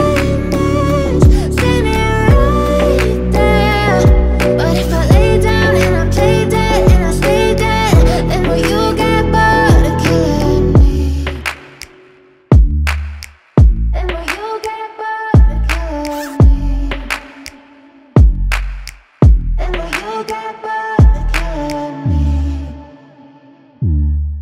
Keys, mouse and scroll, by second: 0.8 Left, 3.1 click, 4.5 alt+scroll down 1, 4.9 space, 5.4 space, 6.0 click, 6.2 space, 9.6 click, 12.1 click, 12.9 Left, 14.9 click, 17.4 Up, 21.4 click, 23.7-24.4 drag.